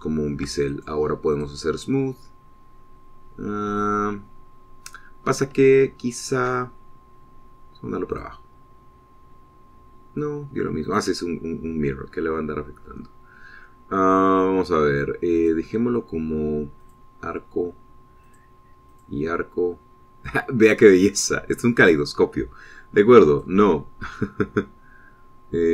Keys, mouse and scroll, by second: 0.6 shift+click, 1.3 shift+middle click, 1.5 shift+click, 2.2 middle click, 3.1 scroll down 2, 3.8-4.8 scroll up 4, 5.1 scroll down 2, 6.5 shift+middle click, 9.0 click, 11.7 click, 16.2 click, 17.7 click, 19.1 click, 19.8 click, 24.2 click.